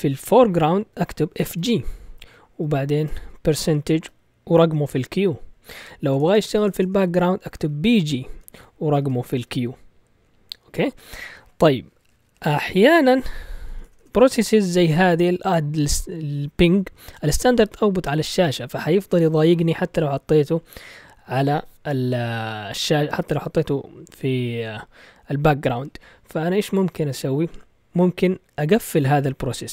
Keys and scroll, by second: 1.1-1.8 typing, 2.9 typing, 4.0 typing, 6.0-9.9 typing, 13.5-14.2 typing.